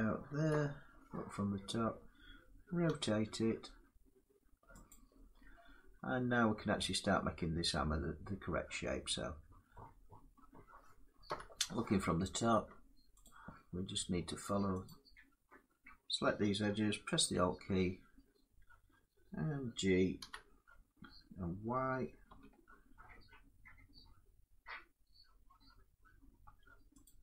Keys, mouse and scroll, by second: 0.2 7, 2.6 r, 4.6 click, 7.4 middle click, 10.0 middle click, 11.0 7, 12.9-14.5 drag, 16.9 alt+click, 19.9 g, 22.0 y, 26.7 click.